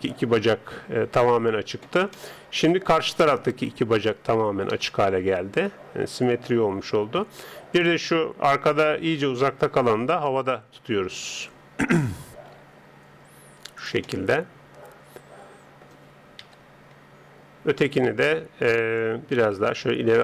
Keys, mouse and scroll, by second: 2.2-4.7 middle drag, 4.7 KP_3, 7.8 right click, 9.7 g, 12.5 g, 14.1-16.1 middle drag, 16.4 KP_3, 17.8 right click, 19.0 click.